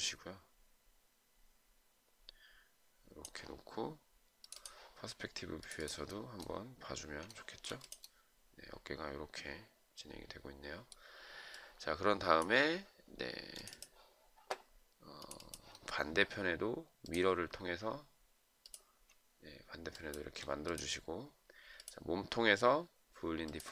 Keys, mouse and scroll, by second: 7.7 shift+right click, 20.3 shift+click.